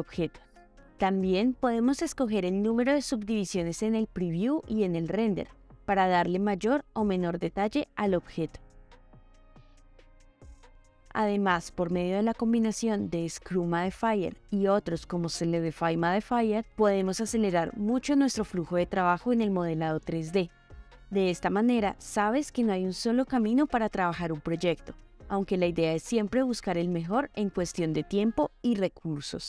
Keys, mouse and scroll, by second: 0.0 middle click, 0.6 g, 3.2-3.5 middle drag, 4.6 click, 5.3 click, 5.4 click, 5.5 click, 6.1 click, 6.9 click, 7.1 click, 7.1 click, 7.2 click, 7.4 click, 7.5 click, 7.5 click, 7.6 click, 7.8 click, 7.9 click, 8.1 click, 8.3 click, 8.4 click, 8.5 click, 8.5 click, 8.7 click, 8.8 click, 8.9 click, 11.4-11.8 shift+middle drag, 12.1-12.9 ctrl+middle drag, 14.4-16.4 drag, 18.4-20.7 drag, 21.0 ctrl+middle drag, 21.3 middle drag, 21.6-22.7 shift+middle drag, 23.1-23.5 shift+middle drag, 23.6 h, 24.1 click, 24.3 middle drag, 24.6 middle drag, 25.7 click, 26.2-26.5 shift+middle drag, 26.6-27.4 middle drag, 27.7-28.1 ctrl+middle drag, 28.3-28.9 shift+drag.